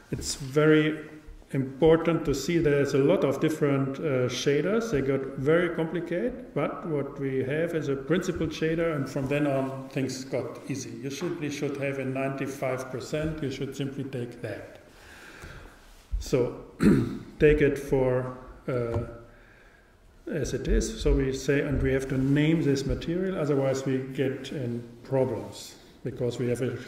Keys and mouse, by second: 4.7-6.5 drag, 23.4 click.